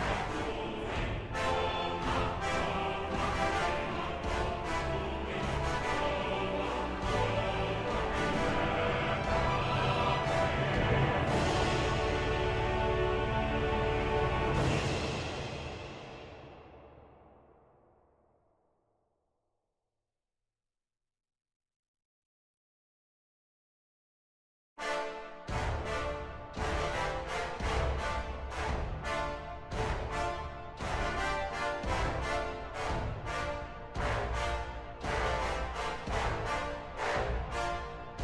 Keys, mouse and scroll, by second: 0.4 ctrl+-, 32.0 right click.